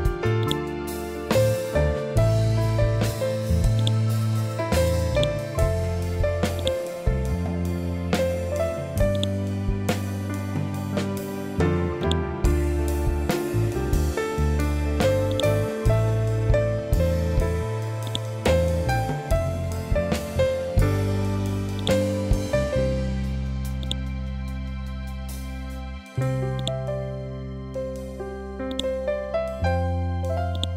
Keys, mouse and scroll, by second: 3.7-10.0 drag, 10.0-10.3 scroll down 1, 11.9-18.0 drag, 18.0-21.2 drag, 21.3 ctrl+Num_Lock, 21.3 click, 21.7-28.6 ctrl+drag.